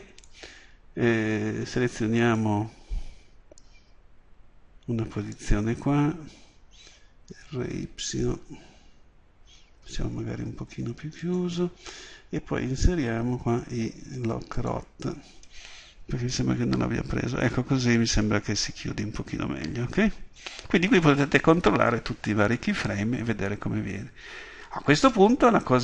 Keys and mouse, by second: 7.0 r, 13.6 i, 16.4-19.7 drag.